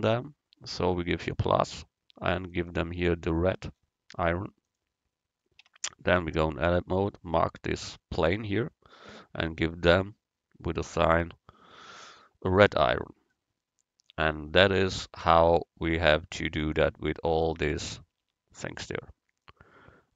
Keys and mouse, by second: 1.3-4.5 drag, 5.7 Tab, 9.1-11.8 drag, 11.9 Tab, 18.3 Tab, 18.8 Tab, 19.4-20.1 drag.